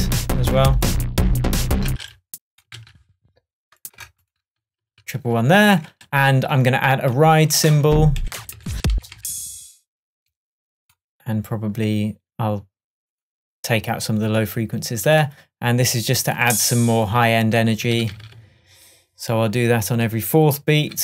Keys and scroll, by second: 1.9 space, 4.0 super+BackSpace, 4.6 super+BackSpace, 4.9 super+v, 5.7 shift+super+Tab, 7.9 Up, 18.0 super+d.